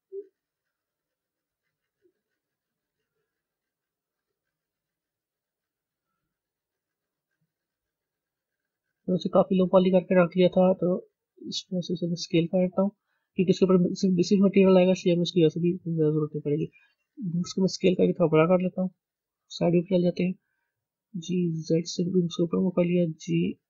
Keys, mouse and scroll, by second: 7.9 scroll down 2, 10.3 s, 13.0-13.4 scroll up 10, 14.0-16.3 scroll up 5, 16.3 click, 17.0 s, 18.3-19.3 middle drag, 19.3 KP_3, 19.6 scroll down 2, 20.7 g, 23.0 g.